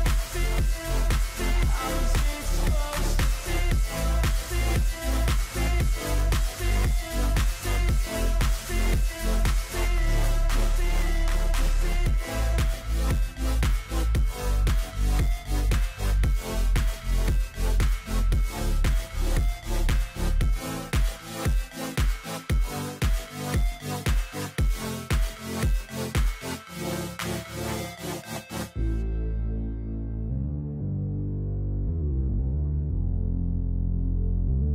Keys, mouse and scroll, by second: 2.3 ctrl+j, 2.3 ctrl+h, 2.7 ctrl+click, 5.1 ctrl+click, 5.6-6.1 scroll down 3, 6.1 scroll down 2, 9.0 shift+click, 11.1 ctrl+g, 12.0 ctrl+-, 12.3 ctrl+-, 12.6 ctrl+-, 18.5-19.1 scroll down 7, 24.0 ctrl+j, 25.9 ctrl+z, 26.2-28.2 scroll up 11, 29.2 ctrl+y, 29.7 ctrl+t, 30.8 shift+click.